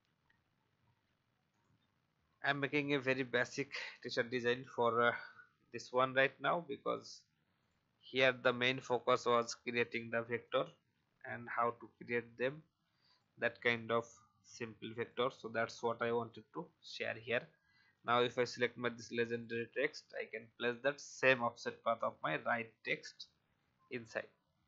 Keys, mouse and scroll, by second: 4.8 ctrl+x, 5.7 click, 8.1 ctrl+f, 9.8 click, 11.5 Delete, 13.0 click, 14.0 alt+scroll down 1, 15.0-17.1 drag, 21.1 ctrl+f, 22.4 alt+scroll up 1, 23.5 click.